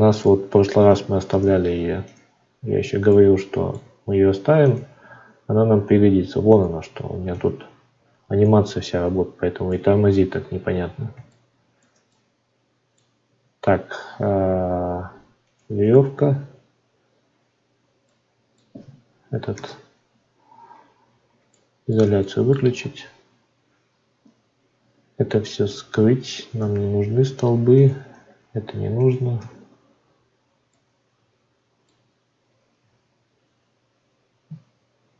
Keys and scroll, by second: 32.8 ctrl+z.